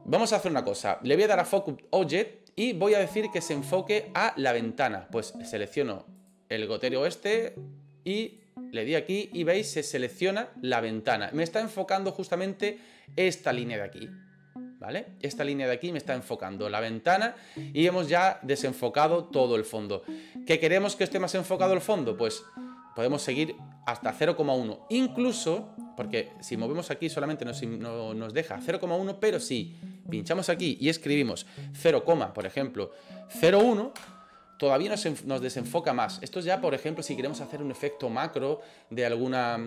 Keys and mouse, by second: 6.2 click, 21.4-23.0 drag, 26.6-27.9 drag, 29.4-39.6 drag.